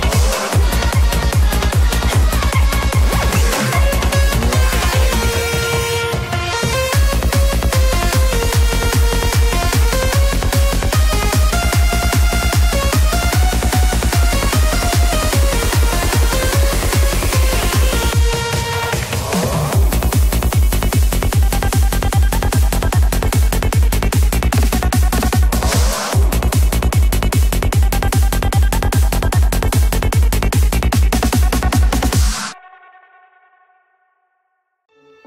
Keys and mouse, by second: 1.2 ctrl+click, 1.7 ctrl+click, 2.6 middle click, 5.1 s, 5.5 x, 8.0 click, 8.4-12.1 middle drag, 13.0-14.2 middle drag, 15.8 s, 16.0 x, 18.2 click, 18.5 middle click, 19.8-21.2 shift+middle drag, 21.6 click, 22.0-23.4 middle drag, 23.6 shift+middle click, 33.0 middle click, 33.9 shift+middle click.